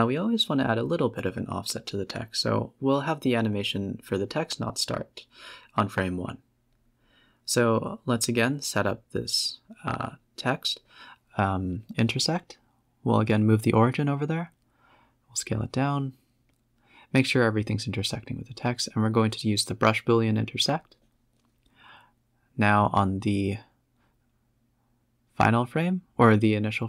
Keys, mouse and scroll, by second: 0.4 shift+a, 1.6 scroll down 2, 1.7 g, 2.8 s, 4.7-5.2 middle drag, 5.2 KP_7, 5.4 z, 5.8 scroll up 4, 6.1 g, 6.7 s, 7.9 x, 8.4 g, 9.5 s, 10.4 Tab, 10.6 g, 12.0 Tab, 12.2 g, 13.3 s, 14.3 middle click, 14.7 z, 15.0 scroll down 6, 15.3 s, 16.2 scroll up 6, 16.4 z, 17.1 shift+click, 17.8 ctrl+shift+b, 19.5 middle click, 19.8 scroll down 5, 19.9-20.7 typing, 21.0-21.7 scroll up 6, 21.7 scroll down 2, 22.2 click, 22.7 s, 24.6-26.7 drag, 26.7 KP_0.